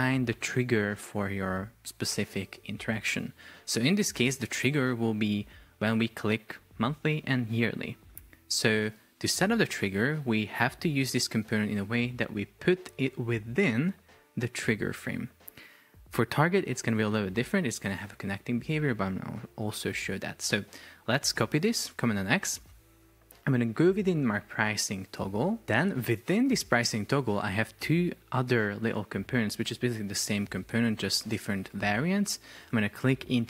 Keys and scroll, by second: 20.5 super+x, 24.5 Return.